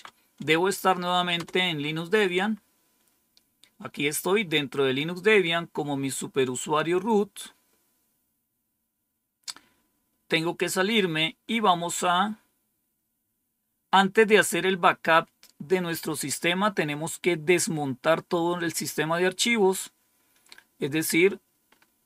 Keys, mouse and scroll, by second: 1.3 Return, 7.1-7.8 scroll down 1, 7.8-8.5 scroll down 1, 10.5-11.8 scroll down 1, 12.3-13.1 scroll down 1.